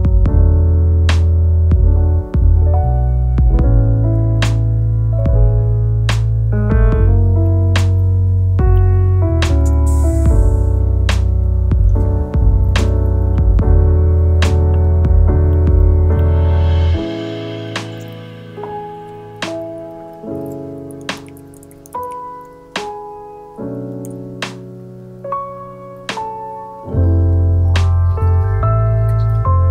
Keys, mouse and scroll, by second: 2.3 ctrl+r, 5.2 Tab, 5.6-7.6 middle drag, 7.6 Tab, 7.9 scroll up 1, 8.1-8.8 scroll down 1, 8.8 3, 10.8 s, 13.1 Tab, 13.4-14.6 middle drag, 15.4-16.2 scroll down 2, 15.5-15.9 middle drag, 16.2-17.2 middle drag, 17.2-18.1 scroll up 2, 18.1 click, 19.1 middle click, 19.1 click, 20.0 click, 23.4 shift+click, 24.1 ctrl+p, 24.6 ctrl+p, 24.8 click, 25.6 click, 26.0-27.4 middle drag, 27.4 shift+click, 27.9 shift+click, 28.9 z, 29.1 scroll down 3, 29.4 click.